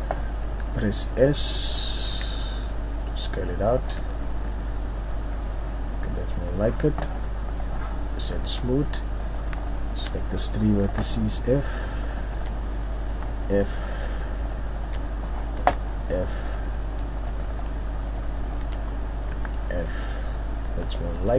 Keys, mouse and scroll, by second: 0.6 s, 3.9 click, 4.4 Tab, 4.4 middle click, 8.3 Tab, 9.5 right click, 9.6 shift+right click, 9.9 shift+right click, 10.8 f, 12.0 shift+right click, 13.1 f, 13.9 right click, 14.5 shift+right click, 15.6 f, 16.4 right click, 17.1 right click, 18.5 shift+right click, 19.3 f, 20.6 Tab, 20.6 scroll up 2, 21.1 Tab.